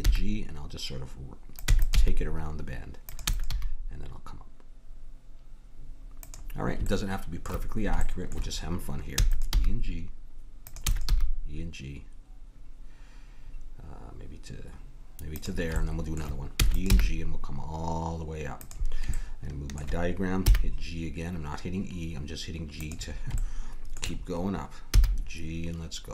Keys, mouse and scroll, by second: 0.0 g, 1.7 e, 2.1 g, 3.3 e, 3.5 g, 7.2-9.5 middle drag, 9.1 e, 9.5 g, 10.8 e, 11.1 g, 15.8-17.7 middle drag, 16.8 e, 16.9 g, 24.9 g, 25.3-26.1 middle drag.